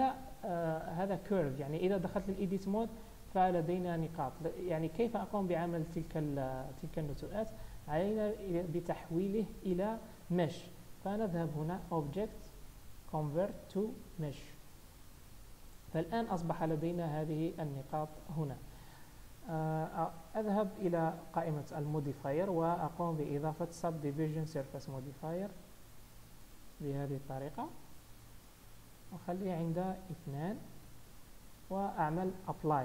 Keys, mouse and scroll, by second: 1.3 Tab, 3.2 click, 7.3 Tab, 11.9 click, 16.0 Tab, 21.6 click, 22.5 click, 26.0 z, 27.0-27.7 scroll up 2, 27.7 middle click, 29.8 click, 30.9 Tab, 31.2-32.8 scroll down 2.